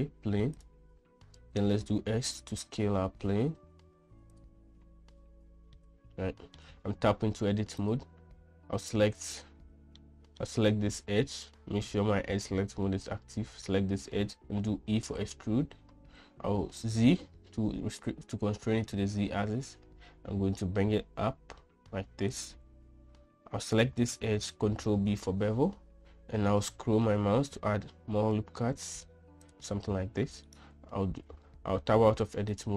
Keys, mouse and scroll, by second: 2.2 s, 6.4-7.2 middle drag, 7.5 Tab, 8.4 click, 10.6 middle click, 15.4 e, 25.4 ctrl+b, 31.1-32.3 right drag, 32.6 Tab.